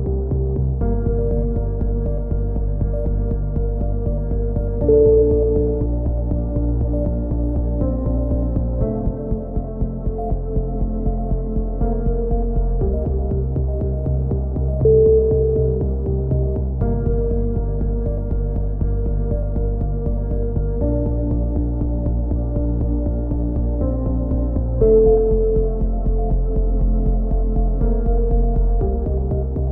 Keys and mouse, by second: 0.4 x, 1.9 a, 2.3 ctrl+z, 2.5 a, 2.9 ctrl+z, 3.1 ctrl+z, 3.3 a, 4.8 click, 5.2 right click, 5.8 click, 7.4 a, 7.5 k, 15.3 click, 15.8 right click, 16.3 x, 17.7 z, 18.0 z, 18.3 click, 18.8 x, 19.5 a, 19.8 middle click, 21.1 middle click, 21.6-23.1 right drag, 22.9 f, 23.1 a, 23.4 z, 24.4 z, 25.1 middle click, 26.8-28.5 drag, 27.2 right click, 28.0 middle click, 28.8 e.